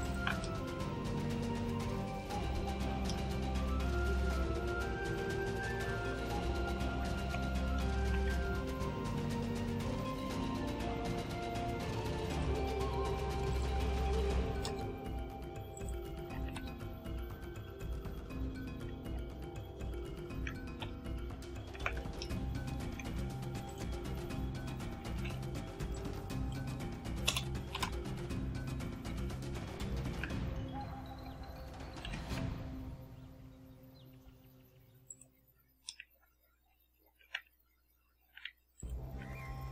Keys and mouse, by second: 0.0 ctrl+click, 0.4 ctrl+middle click, 0.6 ctrl+click, 1.2-2.2 middle drag, 3.1-5.2 middle drag, 5.7 KP_7, 7.3 t, 7.9 shift+a, 12.3 click, 13.5 click, 14.1-15.0 typing, 15.7 click, 16.0-16.8 typing, 19.1 t, 19.9 Tab, 20.8 KP_1, 21.8 z, 22.2 ctrl+click, 23.7 click, 24.8-25.8 typing, 25.9 click, 27.3 Delete, 27.7 Return, 31.1 a, 32.1 s, 32.4 z, 35.1 click, 35.9 middle click, 38.2 s, 38.8 click, 39.2 s.